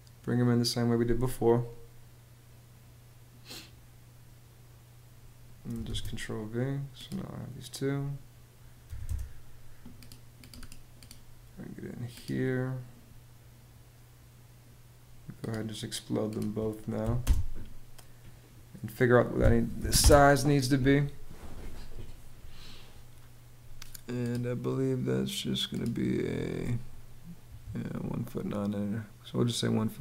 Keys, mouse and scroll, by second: 5.5 super+v, 8.5 m, 8.7 space, 16.6 x, 16.8 space, 19.0 d, 19.4 i, 19.6 space, 27.1 Escape.